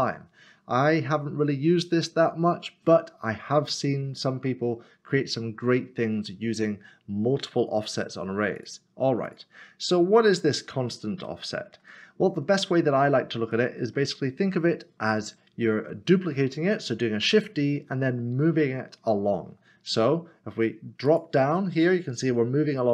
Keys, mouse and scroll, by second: 8.6 click, 11.2 click, 11.3 middle click, 12.2 scroll up 1, 21.1 click.